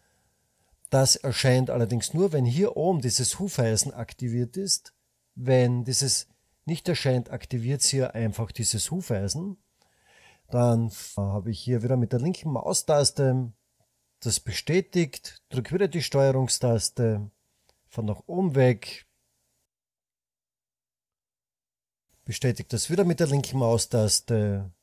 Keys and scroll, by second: 11.6 typing.